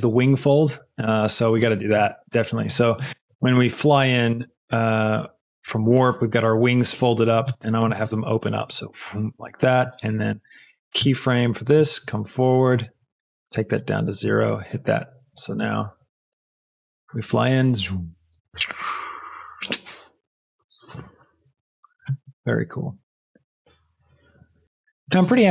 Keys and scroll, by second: 7.4 space, 9.7 space, 11.0 i, 14.1 i, 15.4 space.